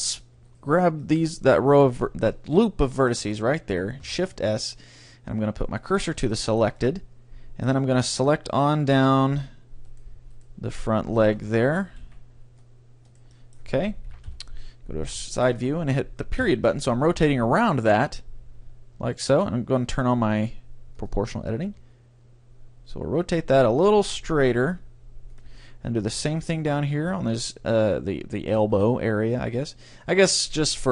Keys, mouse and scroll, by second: 0.5-2.0 right drag, 1.1-5.3 middle drag, 2.0 click, 4.1 shift+s, 6.3-8.5 middle drag, 8.1-13.0 right drag, 11.6-17.1 middle drag, 12.0 c, 13.1-14.9 drag, 14.1 KP_Decimal, 14.3 KP_3, 16.4 ., 18.1 r, 20.0-21.9 drag, 21.7 r, 26.2-27.3 drag, 26.2-28.0 right drag, 28.5 shift+s.